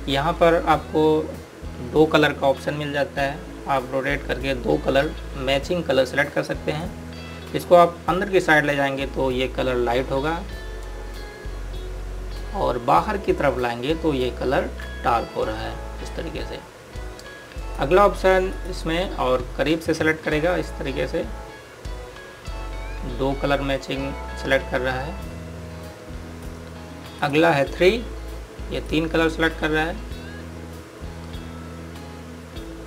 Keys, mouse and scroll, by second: 4.4 click.